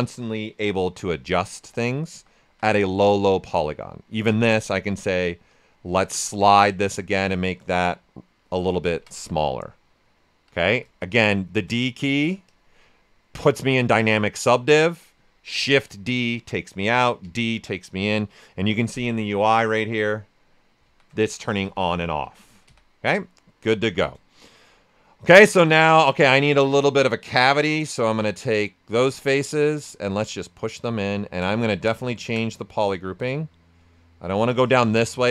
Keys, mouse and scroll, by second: 0.5 q, 0.8 right click, 1.2 ctrl+right click, 1.8 shift+f, 2.4 shift+d, 2.9-4.2 right drag, 4.2 space, 5.4 click, 5.5 space, 6.8-8.8 drag, 8.8 ctrl+right click, 10.6 d, 11.1 shift+g, 12.4 click, 12.8-14.6 right drag, 15.5 shift+d, 18.9-20.8 drag, 20.8 shift+d, 21.6 d, 22.2 shift+d, 23.8 shift+f, 26.3-35.3 alt+drag.